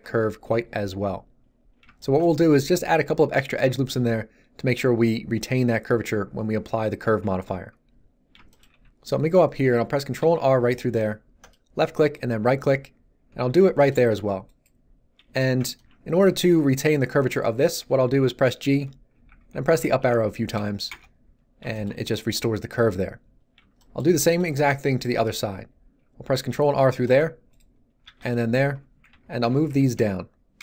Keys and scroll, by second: 8.7 z, 10.2 ctrl+r, 13.4 ctrl+r, 18.6 g, 19.1 Up, 20.9 Return, 26.3 ctrl+r, 29.0 g, 29.4 Down.